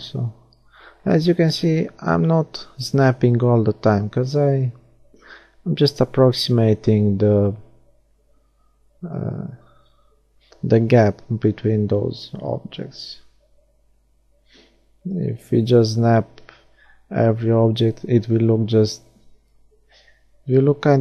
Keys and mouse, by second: 2.3-4.8 middle drag, 3.2-5.2 drag, 5.2-7.3 middle drag, 7.9-9.4 middle drag, 10.0 middle click, 10.6-13.6 right drag, 11.5 shift+d, 12.7 r, 17.5-19.6 middle drag, 19.6-21.0 drag.